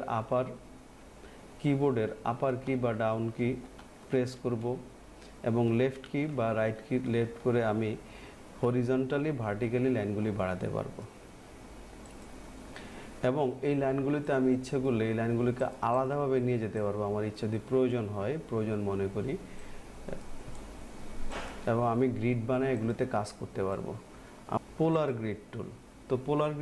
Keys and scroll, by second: 2.6 Up, 5.6 Down, 8.7 Right.